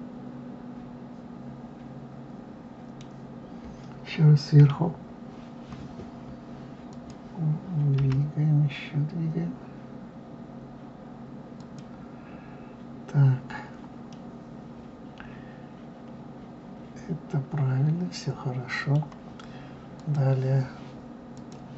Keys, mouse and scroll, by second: 4.5 KP_7, 6.8 click, 7.9 g, 14.0-17.1 middle drag, 19.9 click, 21.3-21.7 drag.